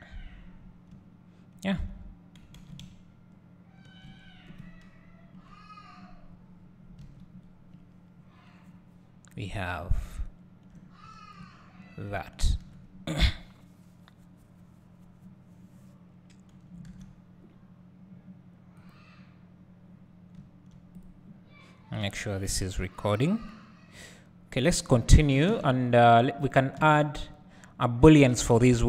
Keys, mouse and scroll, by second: 5.4 KP_0, 6.4 scroll down 1, 7.1 alt+a, 7.6-8.1 scroll up 1, 9.8 `, 11.1 scroll up 1, 11.5 `, 26.6 click, 27.0 `.